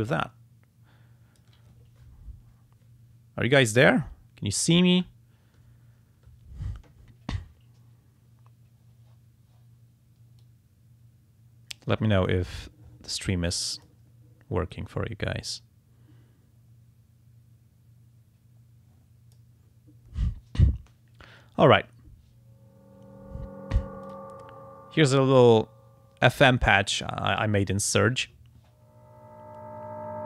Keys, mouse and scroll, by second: 0.4 click, 0.8 click, 10.4-12.0 drag, 13.5 click, 14.7-17.3 drag, 17.3-19.5 drag, 23.7 click, 24.0 click, 25.1 click.